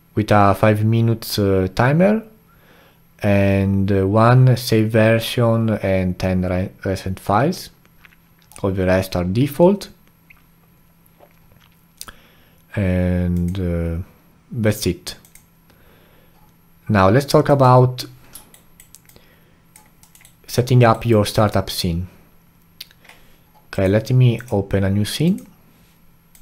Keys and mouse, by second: 18.5-19.0 alt+right drag, 19.0-20.0 alt+drag, 20.0 alt+middle click, 20.2-23.7 alt+right drag, 23.7-26.4 drag.